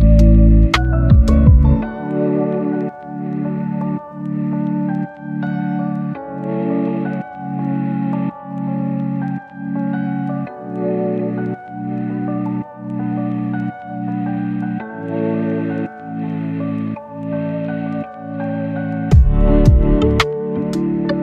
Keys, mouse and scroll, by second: 0.2 right click, 0.6 right click, 0.7 click, 0.9 right click, 1.3 scroll up 1, 1.5 right click, 1.7 click, 1.9 scroll down 1, 2.0 scroll up 1, 2.2 click, 4.5 scroll up 1, 4.8 click, 5.1 scroll up 1, 5.3 click, 5.5 scroll down 1, 5.7-6.1 scroll up 1, 6.2 click, 6.3 scroll down 1, 6.5 right click, 6.8 scroll up 1, 9.9 click, 14.8 right click, 15.4 click, 18.2 right click, 18.6 click, 18.7-21.2 right drag.